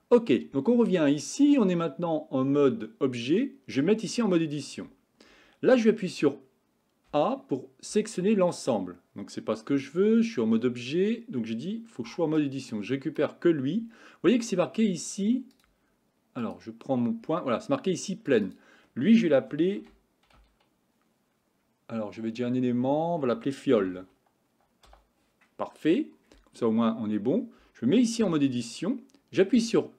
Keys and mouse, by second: 4.3 Tab, 7.2 a, 8.0 a, 10.7 Tab, 12.5-13.2 drag, 18.4-24.9 drag, 28.3 Tab, 29.7 e.